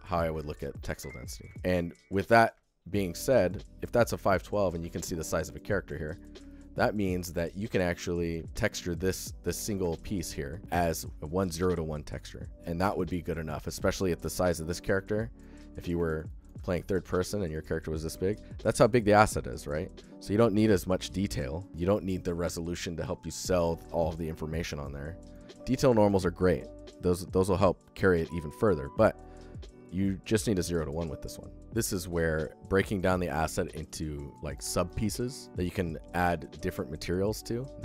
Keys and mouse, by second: 0.2-0.9 alt+shift+middle drag, 1.4 alt+shift+middle drag, 1.5 alt+z, 1.5 alt+click, 1.7 alt+shift+click, 4.1 alt+shift+drag, 4.4 ctrl+alt+drag, 4.7 alt+shift+drag, 6.3-6.7 alt+shift+drag, 7.0 alt+shift+click, 7.9 alt+shift+drag, 9.5 shift+click, 9.8 alt+shift+drag, 12.1 alt+shift+click, 12.7 click, 13.0 alt+shift+click, 13.4 alt+click, 14.6 alt+drag, 14.9 shift+click, 15.4 ctrl+alt+drag, 15.9 alt+shift+click, 16.1 alt+click, 16.4 ctrl+click, 16.7 shift+drag, 16.8-17.1 alt+shift+middle drag, 17.3 ctrl+alt+click, 17.4 alt+shift+click, 17.6 alt+shift+click, 21.8-22.9 alt+shift+drag, 23.3 ctrl+alt+click, 24.6 alt+shift+click, 36.2 click, 36.6-37.8 alt+shift+drag.